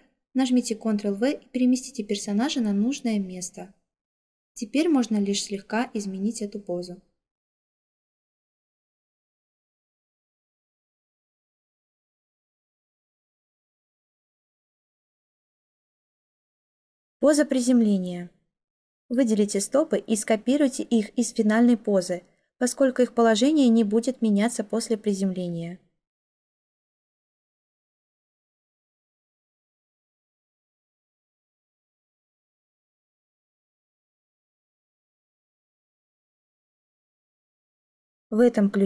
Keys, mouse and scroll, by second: 1.1 ctrl+v, 20.5 ctrl+c, 24.2 ctrl+v.